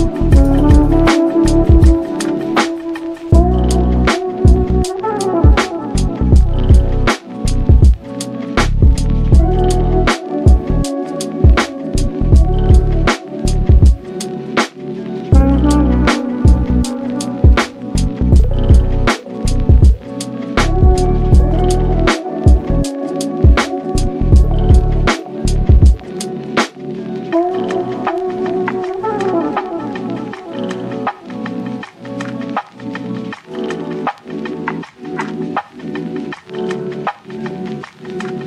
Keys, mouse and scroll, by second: 0.0 click, 0.4-1.2 middle drag, 1.2 click, 1.5-2.3 middle drag, 2.3 click, 2.9 click, 3.1 scroll down 1, 3.3-3.8 shift+middle drag, 3.8 ctrl+s, 4.0 click, 4.2-4.5 scroll up 5, 4.5-5.3 middle drag, 5.3 click, 5.6 shift+right click, 5.8 shift+a, 8.8 click, 9.4 shift+a, 10.3 middle click, 10.6-11.2 scroll down 3, 11.2 r, 12.6 r, 13.6 KP_3, 14.3 scroll up 1, 14.4 shift+middle click, 14.8 Tab, 15.1 ctrl+a, 16.0-16.9 typing, 17.0 Tab, 17.7-18.3 scroll down 1, 18.3 s, 19.4-20.1 scroll up 2, 20.1-21.1 middle drag, 21.1 click, 22.5-23.4 scroll down 2, 23.4-26.2 drag, 26.3-29.8 drag, 30.2 scroll up 1, 30.5-31.5 middle drag, 31.5 KP_3, 32.3 g, 33.8 scroll down 2, 34.1-34.9 middle drag, 34.9-35.3 scroll up 2, 35.3 click, 35.5-35.8 scroll down 1, 35.8-36.2 middle drag, 36.2 scroll down 2, 36.4 scroll up 1, 36.4-37.1 shift+middle drag, 37.1 click, 37.7 KP_3, 38.3 shift+d.